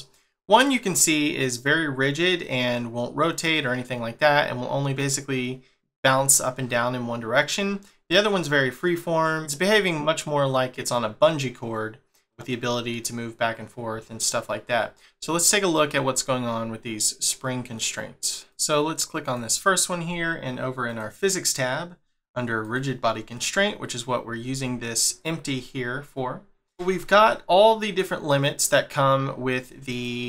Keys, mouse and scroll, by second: 18.5 click, 19.2 click, 20.9 click, 22.6 click, 23.7 scroll up 1, 24.9-25.6 scroll up 1, 25.6 shift+middle click, 29.9 click.